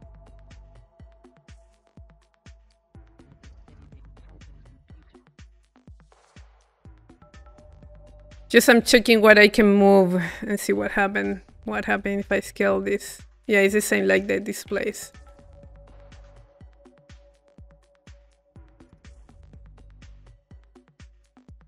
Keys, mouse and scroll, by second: 2.6-6.0 drag, 8.0 click, 9.5-11.0 drag, 11.7-13.8 middle drag, 14.3-16.1 drag, 17.1 click, 18.4 click, 21.4-21.6 drag.